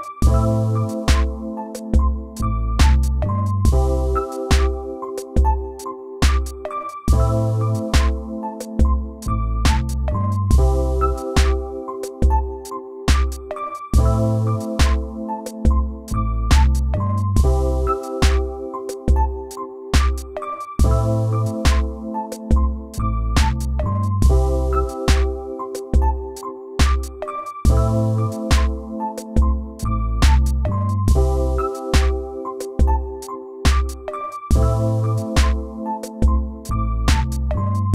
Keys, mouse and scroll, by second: 0.4 right click.